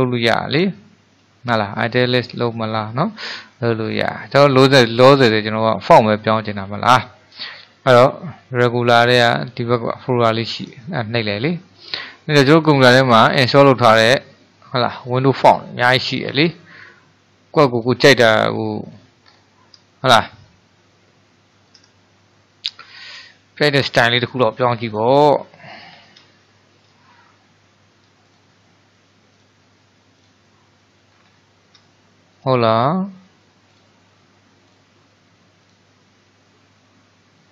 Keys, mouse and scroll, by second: 5.4-8.5 middle drag, 10.7-13.7 drag, 19.3-20.0 scroll down 4, 20.0-25.2 middle drag, 26.0-26.5 scroll up 1, 26.5-28.3 shift+middle drag, 28.3-31.2 drag, 31.2-32.0 scroll up 5, 32.0-33.7 shift+middle drag, 33.7-36.8 drag.